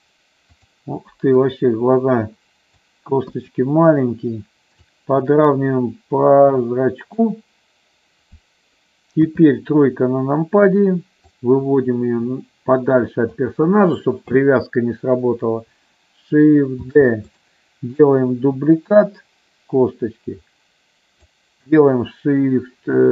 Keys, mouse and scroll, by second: 0.5 click, 1.5-2.7 drag, 3.4 KP_1, 4.8-7.1 drag, 9.1 KP_3, 11.2-13.2 drag, 16.9 shift+d, 18.0-21.2 drag.